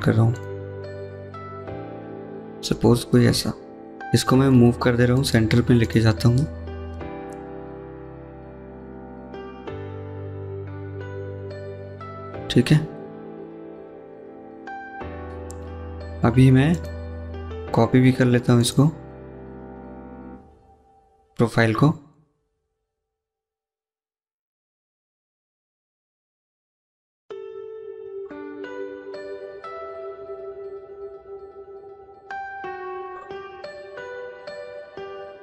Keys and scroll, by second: 3.5 m, 12.4 Escape, 12.6 Escape, 13.7 Escape, 19.4 Delete, 23.3 c, 24.9 Escape, 25.0 Escape, 34.8 Escape, 35.0 Escape.